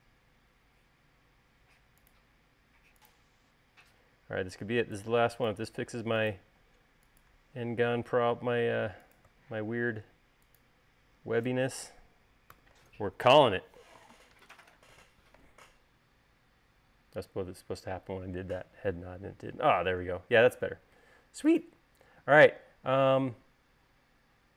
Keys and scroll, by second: 7.5 space, 13.4 u, 23.0 space.